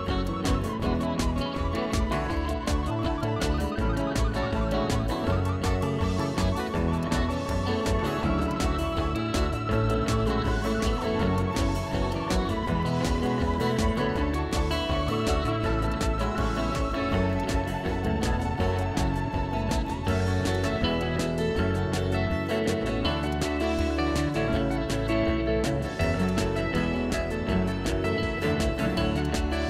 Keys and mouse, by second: 1.2 ctrl+1, 1.3 click, 1.6 a, 1.8 click, 2.1 ctrl+1, 2.2 click, 3.4 click, 4.4 ctrl+s, 5.4 click, 8.3 Escape, 8.4 click, 9.2 right click, 9.7 click, 9.9 ctrl+click, 10.6 click, 11.0 ctrl+1, 11.2 click, 11.4-13.2 typing, 12.1 click, 13.3 ctrl+1, 14.1 click, 20.9 right click, 21.9 click.